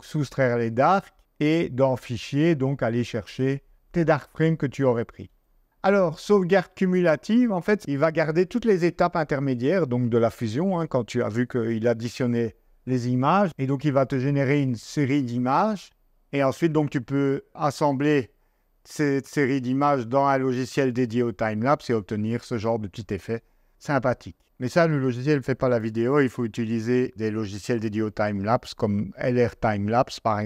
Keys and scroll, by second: 13.4 super+Tab, 24.0 Escape, 25.7 super+q.